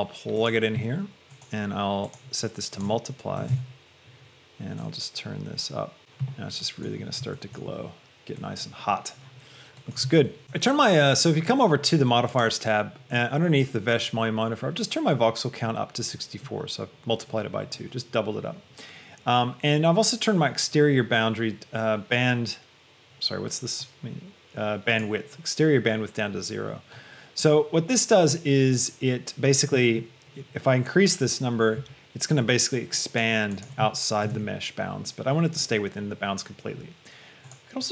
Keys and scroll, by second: 3.6 Return, 34.5 Return.